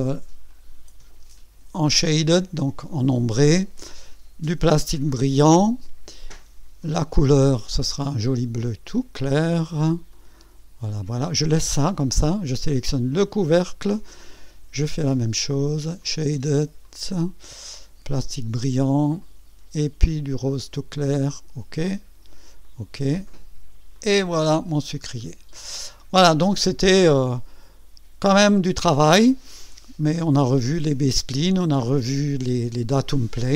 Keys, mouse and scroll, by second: 0.5 click, 1.9 click, 3.2 click, 5.0 click, 6.8 click, 8.8 click, 10.1 click, 13.1 click, 15.3 click, 16.0 click, 16.8 click, 18.2 click, 19.2 click, 20.5 click, 21.7 click, 22.6 click, 23.3 click, 23.9 click, 24.7 scroll down 1, 25.1 scroll up 1, 25.6 right click, 27.0-29.5 drag, 30.5 scroll up 2, 31.1 right click.